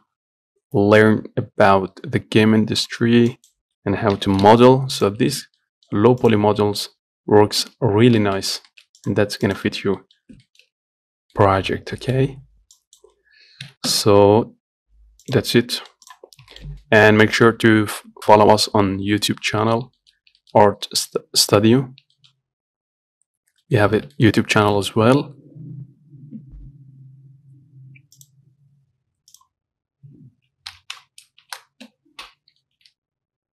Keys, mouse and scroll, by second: 3.5 click, 4.4 g, 5.4 Tab, 5.6 scroll down 1, 5.8 middle click, 6.2 scroll up 1, 6.5 click, 6.7 Tab, 7.7-8.2 scroll down 3, 7.9 Tab, 8.4 shift+middle click, 8.7 scroll up 2, 8.9 shift+middle click, 9.2 click, 9.7 click, 9.9 Tab, 10.2 middle click, 10.4 scroll up 1, 10.7-13.0 shift+middle drag, 13.0 click, 13.9 g, 15.6 Tab, 15.8 scroll down 2, 16.1 middle click, 16.3 click, 16.6 scroll up 1, 16.8-19.6 shift+middle drag, 19.6 scroll down 2, 19.9 middle click, 20.5 scroll up 2, 20.7-22.1 shift+middle drag, 22.1-22.4 scroll down 1, 22.4-23.6 shift+middle drag, 23.6 scroll down 1, 23.9 middle click, 24.1-24.4 scroll up 1, 24.4 shift+middle click, 24.8 scroll down 1, 25.0 middle click, 25.4 scroll down 1, 25.7-28.6 scroll up 2.